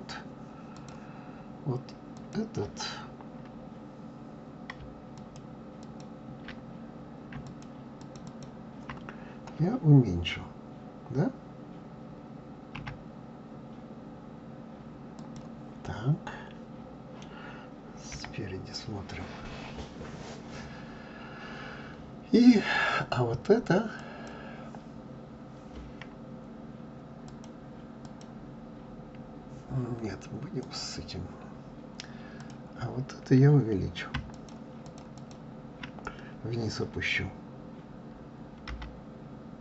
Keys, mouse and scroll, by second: 2.1 click, 5.1 ctrl+click, 5.8 ctrl+click, 7.4 shift+click, 8.0 shift+click, 8.2 shift+click, 12.8 s, 15.8-18.1 middle drag, 18.1 KP_1, 24.0 click, 27.3 click, 28.0 click, 30.6 click, 32.3 click, 34.3 shift+click, 34.8 shift+click, 35.1 shift+click, 38.7 g.